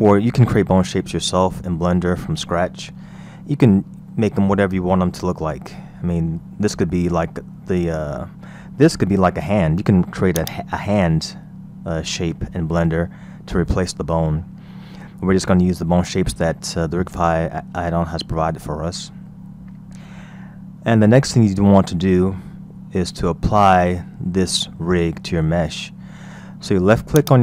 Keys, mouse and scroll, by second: 2.9-3.2 scroll up 2, 3.5-4.1 scroll down 3, 5.9 scroll up 1, 7.2-9.1 middle drag, 9.1 scroll up 2, 10.4-11.9 drag, 11.9 scroll up 2, 13.3 scroll down 1, 14.6-14.9 scroll down 2, 15.1-18.0 middle drag, 21.2 KP_1, 22.0-22.5 scroll up 2, 27.2 click.